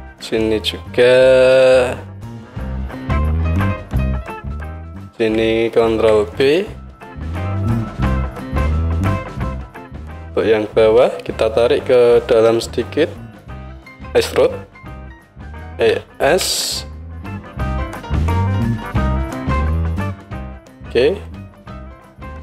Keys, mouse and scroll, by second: 0.0 ctrl+r, 4.0 click, 5.9 ctrl+b, 8.5-9.6 drag, 9.6 alt+middle click, 9.6 alt+right click, 9.7-21.3 alt+drag, 15.8 e, 21.3 middle click, 21.3-22.4 right drag.